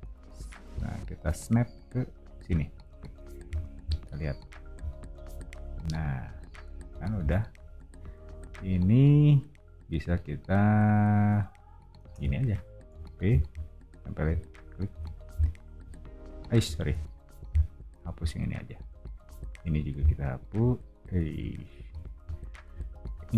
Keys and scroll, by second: 3.4 o, 12.0 space, 12.9 p, 15.0 e, 16.9 super+z, 21.3 super+z, 21.8 o, 23.0 e.